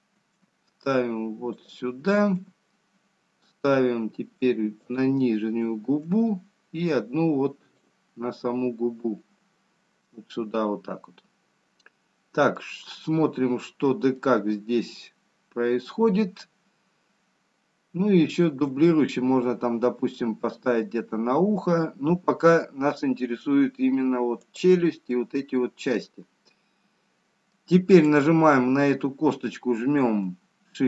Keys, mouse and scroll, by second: 1.7 shift+d, 2.4 shift+d, 6.1 shift+d, 12.9 middle click, 16.1-17.4 scroll down 1, 19.4 shift+d, 25.5 middle click, 29.8 click.